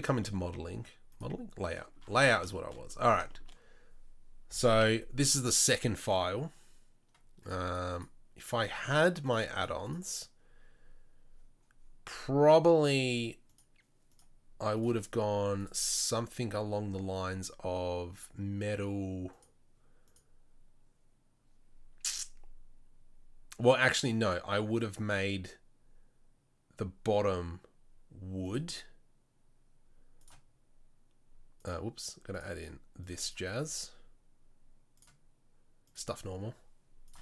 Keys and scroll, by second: 4.8 n.